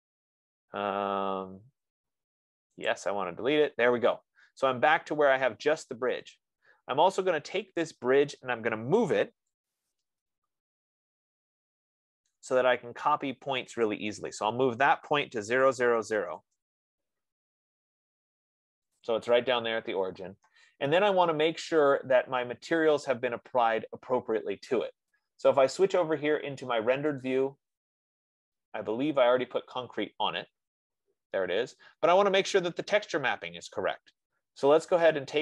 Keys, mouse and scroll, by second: 3.5 click, 8.1 click, 9.4-10.6 typing, 11.2-12.5 scroll, 12.5 scroll, 14.4 click, 15.3-17.0 typing, 17.9-18.5 scroll, 18.9-19.3 scroll, 19.5 click, 21.2 middle click, 26.4 click, 27.8 click.